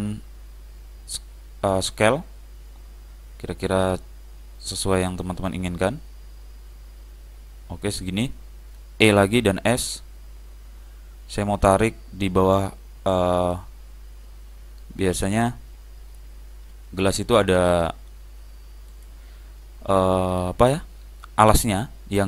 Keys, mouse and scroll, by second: 9.2 e.